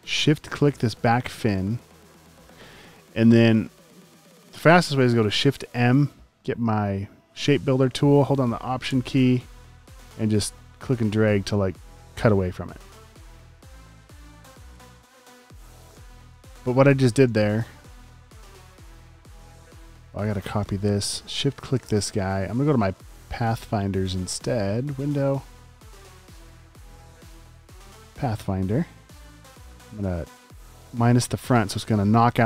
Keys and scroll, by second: 0.5 space, 1.7 space, 1.9 space, 5.6 m, 13.1 super+z, 15.1 shift+super+z, 15.9-17.2 typing, 19.1 space, 20.5 super+c.